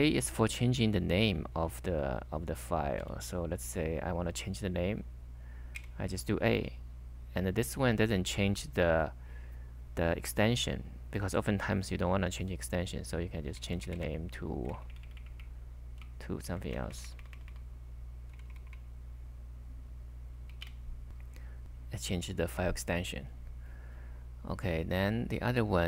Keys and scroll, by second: 1.5 k, 3.0 k, 3.1 k, 5.7 a, 13.4-14.3 typing, 14.8 Left, 16.0 alt+Right, 16.3 alt+Right, 17.5-18.7 typing, 20.5 Return, 20.7 Return.